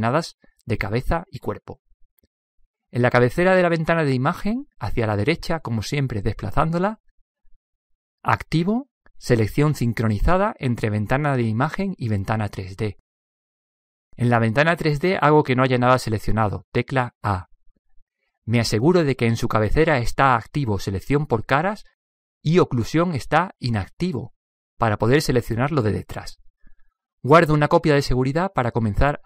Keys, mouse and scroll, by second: 5.1-8.1 middle drag, 10.6-12.4 drag, 16.9 a, 22.9 click, 23.4-25.1 drag, 28.2-29.0 drag.